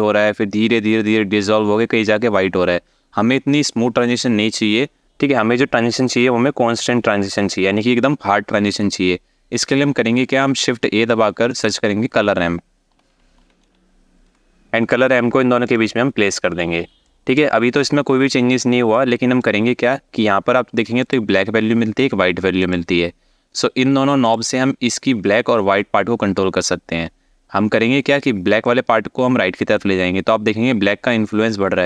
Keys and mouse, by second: 10.4 shift+a, 16.7 alt+shift+middle click, 18.8 click, 22.3 click, 23.9 click, 28.3-31.8 drag.